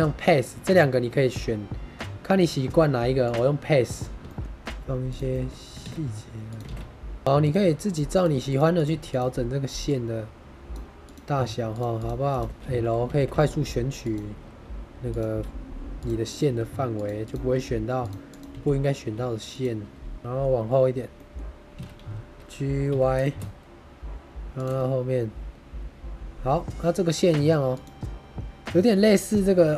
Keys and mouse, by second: 4.3 shift+click, 4.4 shift+d, 5.0 click, 5.3 shift+middle click, 5.7 shift+d, 6.4 click, 7.2 g, 7.3 click, 7.5 g, 7.8 click, 8.4 click, 8.8 g, 9.0 click, 9.8 click, 11.0 click, 11.6 shift+click, 12.5 l, 13.1 shift+d, 13.9 click, 15.0 click, 15.2 g, 15.9 click, 16.4 g, 16.8 click, 17.9 click, 17.9 g, 18.4 g, 19.4 click, 20.2 Tab, 20.2 middle click, 21.1 middle click, 21.6 g, 21.6 x, 22.8 y, 24.4 shift+middle click, 24.8-26.8 middle drag.